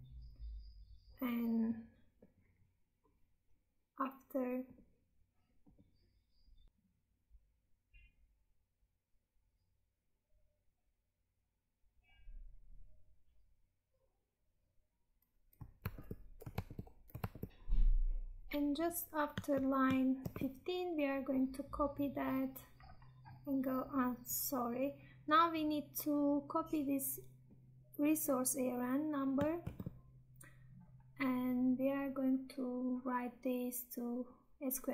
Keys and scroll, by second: 16.1 Tab, 20.2 ctrl+v, 29.5 ctrl+c.